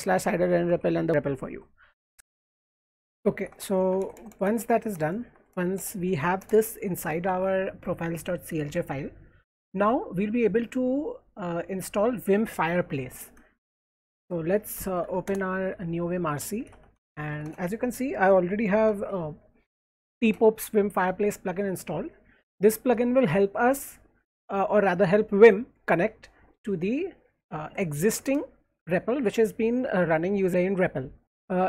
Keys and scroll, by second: 0.0-1.2 typing, 3.0-5.8 typing, 6.1 Right, 6.4 Return, 14.0-18.9 typing, 20.2 shift+v, 31.2 Escape.